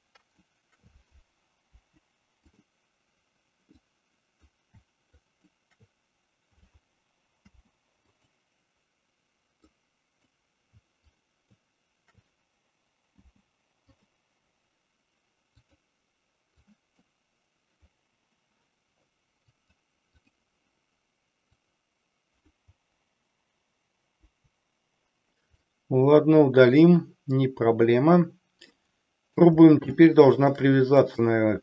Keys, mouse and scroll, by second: 1.7 Delete, 3.8 click, 5.2 shift+click, 7.4 p, 9.8 click, 11.1 shift+click, 13.2 p, 15.7 click, 16.7 click, 19.4 click, 21.5 click, 24.2 Delete, 25.7-26.8 middle drag, 28.5-29.4 middle drag, 30.1-30.5 shift+middle drag, 31.2 drag.